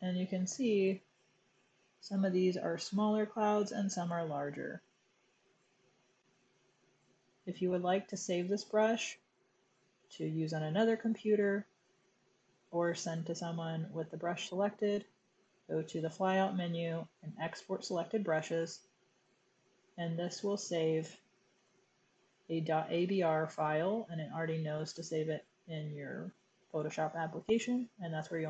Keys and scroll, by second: 20.8-22.1 typing.